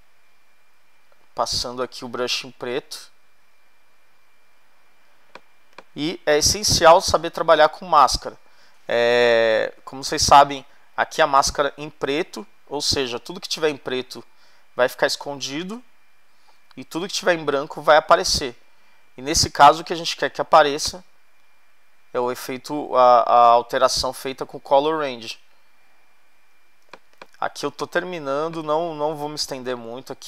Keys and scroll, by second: 5.5 space, 20.2 x, 26.9 space.